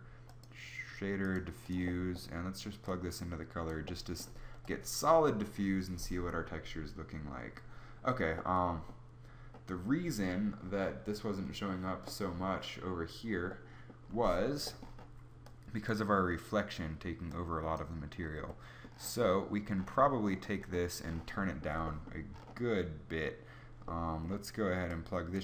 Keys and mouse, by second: 1.9 Escape, 1.9 KP_0, 1.9 shift+z.